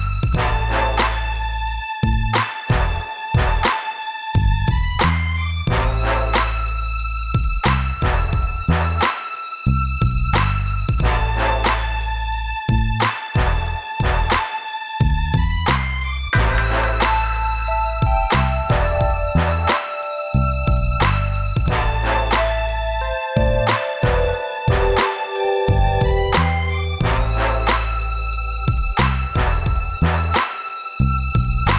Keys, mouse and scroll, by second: 0.4 scroll down 2, 1.2 middle click, 1.8-2.2 scroll down 1, 2.6 middle click, 4.1 scroll up 1, 4.6 middle click, 6.7 scroll down 2, 9.0 click, 9.0 click, 9.8 click, 9.9 click, 11.0 scroll up 2, 14.7 click, 14.8 click, 15.5 click, 17.3 click, 18.4 click, 19.7 click, 20.8 click, 20.9 click, 21.6 f, 22.5 middle click, 23.8 middle click, 30.3 click.